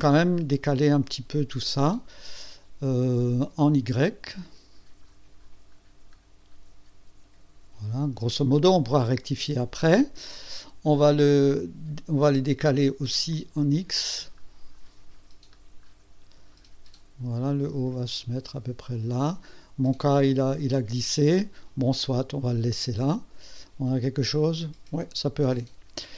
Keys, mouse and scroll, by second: 3.6 click, 4.3-5.0 scroll down 2, 5.7-7.2 scroll down 3, 6.8 middle click, 7.2 middle click, 7.6 scroll up 1, 7.8-11.3 middle drag, 12.6 click, 13.5-14.6 scroll down 5, 15.1-17.9 scroll down 12, 18.3 scroll down 1, 20.1 click, 23.0-26.1 drag.